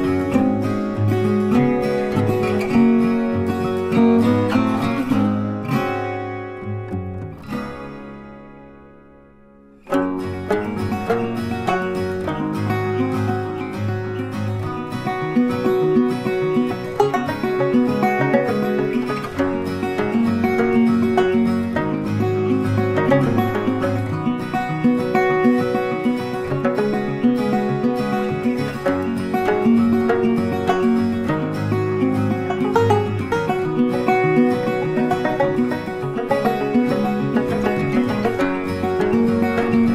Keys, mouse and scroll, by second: 4.6 click, 10.2 click, 22.9 right click, 25.6 click, 37.5-39.7 scroll up 1.